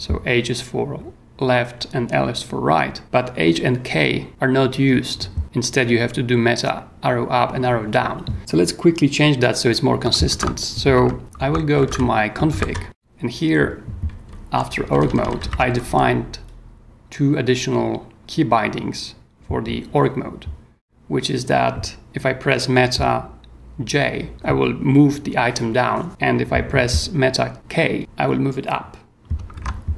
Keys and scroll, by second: 10.3 ctrl+w, 10.9 ctrl+v, 11.4-13.1 typing, 14.2-16.2 typing, 29.5 ctrl+g.